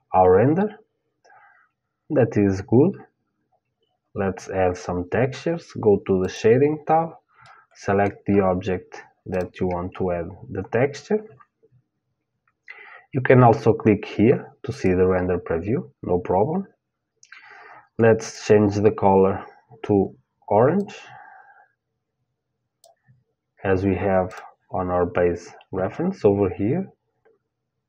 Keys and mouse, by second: 0.5-5.9 middle drag, 5.9-7.8 drag, 7.8-9.0 middle drag, 9.0-16.3 drag, 17.8-19.8 drag, 23.9-25.9 drag, 27.6-27.8 drag.